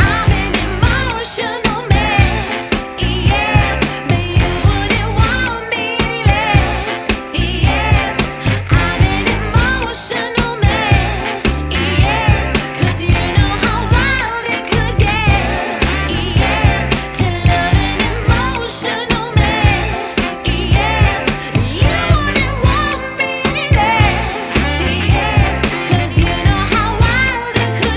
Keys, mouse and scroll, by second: 8.1-9.3 scroll down 2, 9.3 scroll up 1, 9.7 scroll down 2, 11.8-12.3 scroll up 1, 13.6 z, 18.3 z, 23.5 n, 23.6 F10, 25.8 right click.